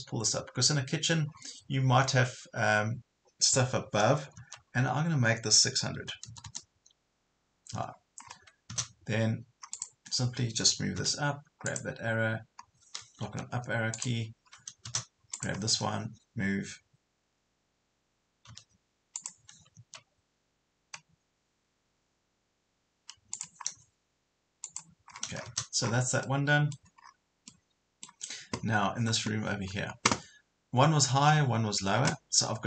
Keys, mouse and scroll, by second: 1.3 scroll down 1, 4.4 Up, 6.0 KP_6, 8.2 scroll up 1, 9.7 click, 11.0 m, 11.7 click, 13.2 Up, 13.9 click, 18.5 m, 19.1 click, 19.7 click, 21.9 Escape, 23.3-24.4 drag, 25.1 scroll down 1, 26.3 middle click, 27.0 scroll up 1, 27.5 middle click, 31.7 scroll down 1.